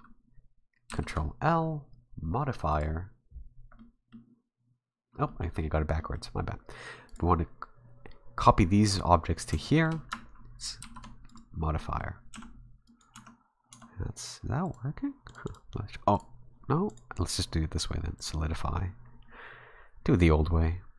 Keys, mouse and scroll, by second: 0.9 ctrl+l, 3.8 middle click, 5.3 middle click, 6.0 middle click, 7.1 right click, 9.6 shift+right click, 10.8 ctrl+l, 11.8 middle click, 12.1 scroll up 2, 12.3 a, 12.9 right click, 13.1 Tab, 13.7 Tab, 14.6 click, 15.3 click, 15.5 click, 16.1 right click, 16.9 click.